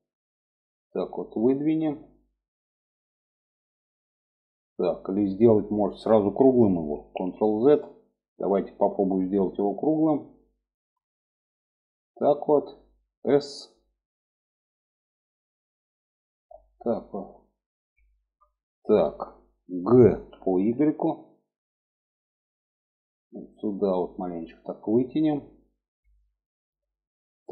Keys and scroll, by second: 6.5 ctrl+z, 13.0 s, 19.6 g.